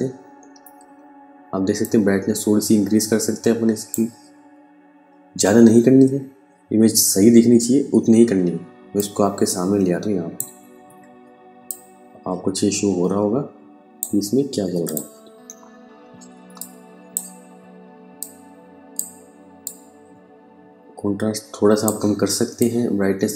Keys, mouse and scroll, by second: 1.4 click, 5.5 KP_Subtract, 8.4 click, 15.8 space, 16.0 click, 16.4 space, 17.6 click.